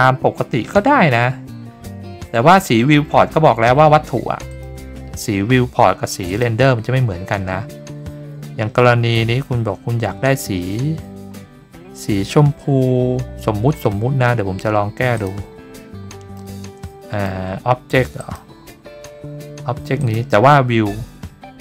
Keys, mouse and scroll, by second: 0.6-1.3 scroll down 5, 1.3-2.4 scroll up 8, 2.9-4.0 scroll down 7, 4.5 click, 5.0-5.4 scroll down 4, 6.2 click, 7.8 scroll up 3, 8.2-8.9 scroll down 3, 8.9 scroll up 2, 9.5-10.7 scroll down 2, 12.2 scroll down 3, 12.6-13.1 scroll up 3, 13.1 scroll down 3, 15.1 click, 15.7-16.3 middle drag, 16.8-17.2 shift+middle drag, 18.2 click, 20.0 click.